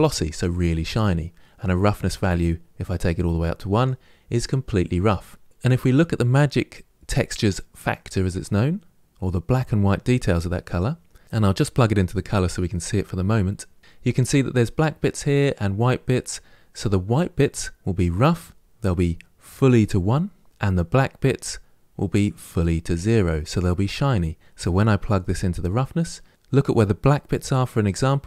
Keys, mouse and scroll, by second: 5.5 ctrl+z, 10.5 click.